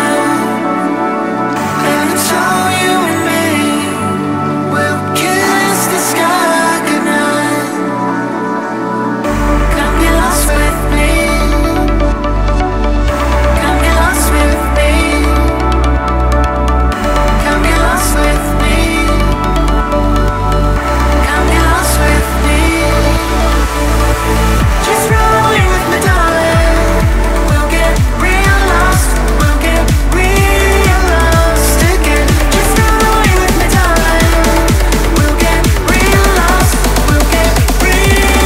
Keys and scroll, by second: 7.3 0, 11.9 space, 17.6 Return, 23.4 Return, 24.0-25.4 typing, 30.9 typing, 32.6 shift+p, 35.9-37.0 typing.